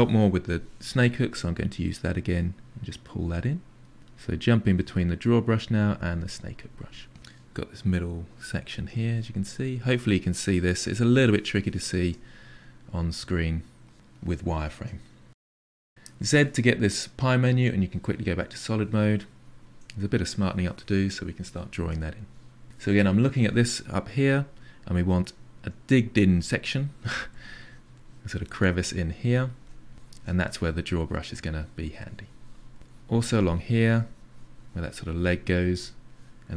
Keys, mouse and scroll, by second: 0.9 click, 1.2 click, 1.8 click, 2.4 click, 2.8 click, 3.6 shift+click, 4.1-5.2 drag, 5.2 f, 5.5-6.6 drag, 6.6-7.8 middle drag, 7.8 f, 8.0 middle click, 8.3 click, 9.1 middle click, 9.4 shift+click, 9.7-10.7 middle drag, 10.7 click, 11.5 middle click, 12.4 click, 12.6 click, 12.8-17.5 middle drag, 17.5 z, 17.9-19.2 middle drag, 19.2-21.6 shift+drag, 21.6 f, 22.3 f, 22.8-25.0 middle drag, 25.0 ctrl+click, 25.9 ctrl+click, 26.6 ctrl+click, 27.1 ctrl+click, 27.4 ctrl+click, 28.0 ctrl+click, 28.3 middle click, 28.7 shift+click, 29.3 middle click, 29.7 shift+click, 30.0 middle click, 31.0 click, 31.4 click, 31.9-33.0 middle drag, 33.0 click, 33.4 click, 34.4 click, 35.2 click, 35.7 middle click, 36.3 click.